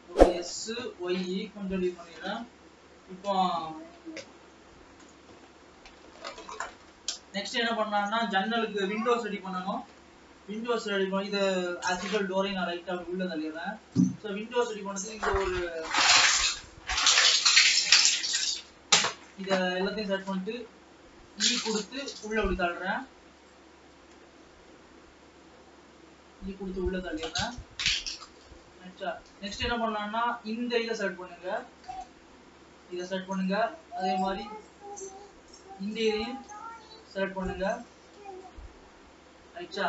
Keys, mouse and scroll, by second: 11.9 e, 14.6 alt+a, 15.2 ctrl+r, 18.2-20.7 drag, 20.7-21.2 scroll up 2, 21.2 middle click, 22.1 e, 23.9 scroll down 2, 24.1 ctrl+z, 25.7 e, 27.5 scroll down 1, 27.7-29.0 middle drag, 29.0-29.7 scroll up 5, 29.7-31.7 shift+middle drag, 31.7 Left, 32.1 Left, 33.6 scroll down 2, 33.9-35.5 middle drag, 35.5-35.9 scroll up 4, 35.9-37.0 middle drag, 37.0 shift+click, 38.0 ctrl+z, 38.5 shift+click, 38.9-39.5 scroll down 4, 39.5 shift+middle click.